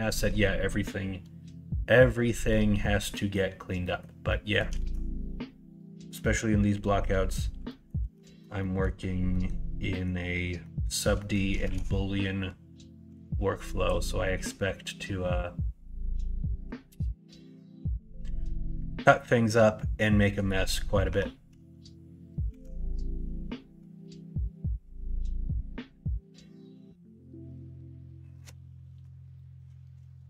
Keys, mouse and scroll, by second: 2.2 middle click, 3.1 middle click, 3.8 middle click, 4.2 middle click, 4.8 shift+a, 7.6 middle click, 8.2 alt+z, 8.6 middle click, 9.3 middle click, 9.9 middle click, 10.6 middle click, 11.1 middle click, 11.6 shift+a, 21.0 Tab, 22.4 shift+a.